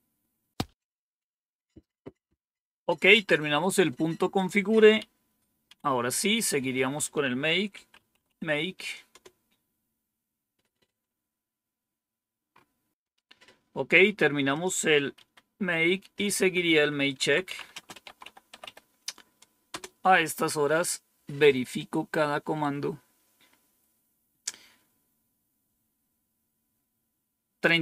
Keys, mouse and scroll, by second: 4.2 click, 4.9 Up, 5.6 Down, 7.4-8.7 typing, 9.0 Return, 12.4 scroll up 1, 14.4 click, 15.1 Up, 16.2 Down, 16.9-19.0 typing.